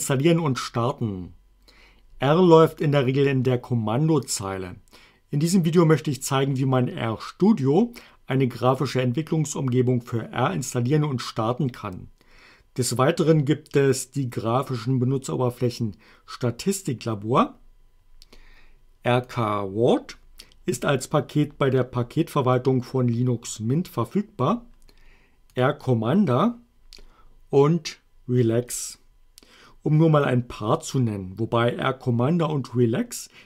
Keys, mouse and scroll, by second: 19.3 click, 25.6 click, 28.7 click.